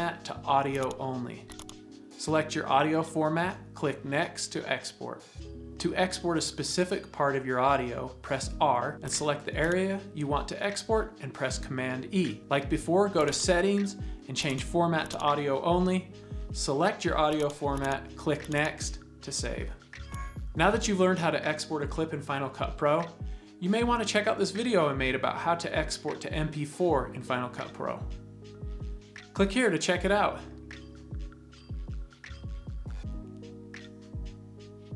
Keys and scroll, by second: 8.2 r, 10.8 super+e.